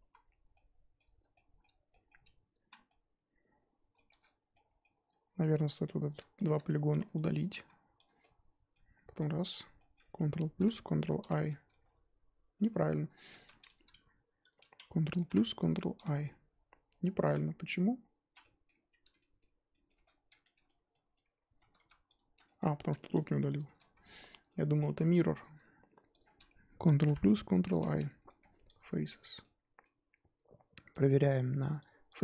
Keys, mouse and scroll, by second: 0.1 z, 0.5-2.2 middle drag, 2.2-2.7 scroll up 1, 2.7 z, 2.9-4.1 middle drag, 4.1 Tab, 4.5-5.0 middle drag, 5.0 Tab, 5.8 click, 7.2 shift+click, 8.0 x, 8.2-9.2 middle drag, 9.2 alt+click, 9.7 middle click, 10.6 ctrl+KP_Add, 11.2 ctrl+i, 12.5-13.7 middle drag, 13.7 alt+Left, 15.2 ctrl+KP_Add, 15.9 ctrl+i, 17.4 z, 18.0 scroll down 1, 18.3 z, 18.4-18.8 middle drag, 18.8 Tab, 19.1-19.9 shift+middle drag, 19.9 Tab, 20.1 scroll up 2, 20.4-21.2 middle drag, 21.2-21.9 scroll down 1, 22.1 click, 22.4 shift+middle drag, 22.6 scroll down 1, 22.6-23.1 scroll up 1, 23.1 shift+click, 23.5 shift+click, 24.2 x, 24.3 scroll down 2, 24.5-24.8 middle drag, 24.8 3, 25.4 alt+click, 27.0 ctrl+KP_Add, 27.7 ctrl+i, 28.7 x, 29.0 Tab, 29.1 scroll down 2, 29.4-32.0 middle drag, 32.0-32.2 drag.